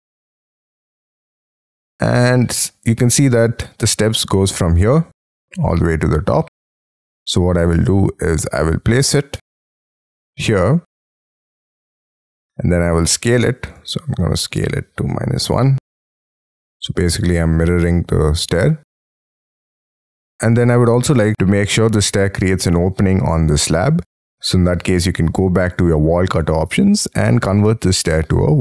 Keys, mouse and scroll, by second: 0.3-0.7 scroll up 5, 0.7-1.4 scroll down 6, 1.4-1.9 scroll up 5, 1.9-2.5 scroll down 6, 6.8 scroll down 1, 7.0 scroll up 4, 7.7 scroll down 4, 11.0 scroll up 4, 11.5 middle click, 12.8 s, 12.9 scroll up 4, 15.1 typing, 20.1 middle click.